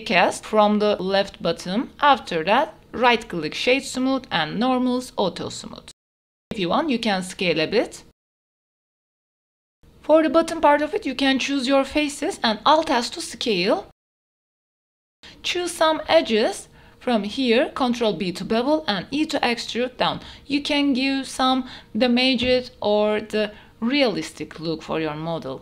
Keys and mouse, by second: 0.2 click, 1.6 click, 3.6 click, 4.0 middle click, 5.6 s, 7.6 shift+z, 8.6 middle click, 9.2 middle click, 9.4 ctrl+s, 10.9 Tab, 11.7 3, 12.1 alt+click, 13.1 alt+s, 14.6 click, 14.8 Tab, 14.8 middle click, 15.0 Tab, 15.0 click, 15.5 2, 15.9 click, 18.2 ctrl+b, 19.6 click, 20.4 e, 21.7 click, 22.0 Tab, 22.3-23.0 drag, 23.2 Tab.